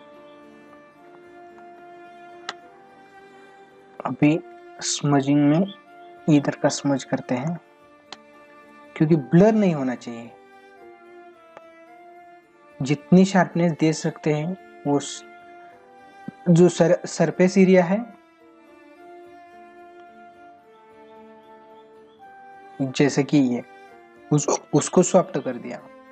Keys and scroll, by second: 0.6 ctrl+=, 1.6 space, 5.0 ctrl+=, 7.5 space, 21.3 ctrl+=, 25.0 ctrl+=.